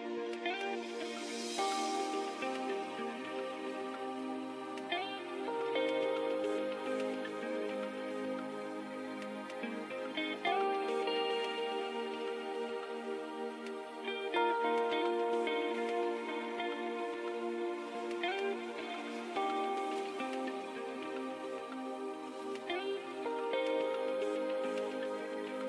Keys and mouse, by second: 2.9 ctrl+alt+shift+c, 6.2 x, 6.9 shift+a, 13.2 middle click, 13.7-17.9 drag, 21.2-23.5 drag, 23.5 middle click, 24.1 ctrl+2, 24.7 Tab.